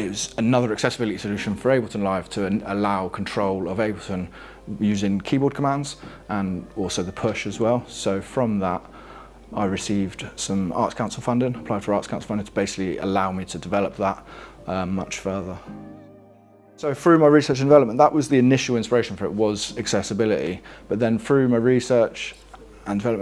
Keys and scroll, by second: 0.3 alt+Down, 0.9 alt+Down, 1.7 alt+Down, 3.2 alt+Down, 3.9 alt+Down, 5.1 alt+scroll down 3, 5.9 alt+scroll down 1.